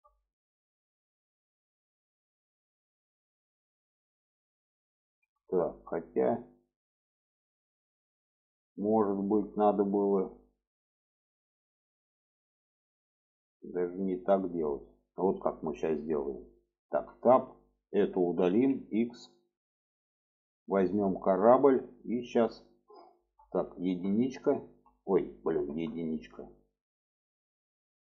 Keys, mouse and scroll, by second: 0.6 middle click, 1.8-3.3 middle drag, 3.7 middle click, 4.5 shift+middle click, 5.4-8.5 middle drag, 8.9 shift+middle click, 9.7-10.2 middle drag, 10.8-14.4 middle drag, 14.7 middle click, 16.7 Tab, 17.1 middle click, 18.3 x, 19.3-19.7 middle drag, 20.4 click, 21.0-21.8 middle drag, 22.9 shift+middle click, 23.7 1, 25.5 Tab, 27.6 click.